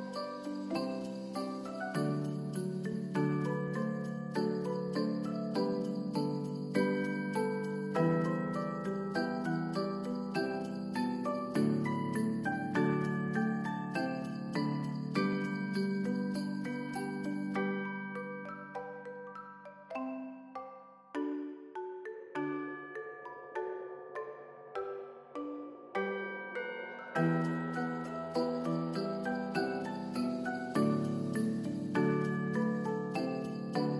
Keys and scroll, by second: 1.9 u, 4.7 alt+], 5.2 ctrl+s, 11.1 ctrl+s, 13.4 End, 14.5 n, 15.3 Home, 15.8 ctrl+s, 17.1 space, 19.1 space, 22.6 ctrl+s, 25.2 ctrl+s, 33.0 ctrl+s.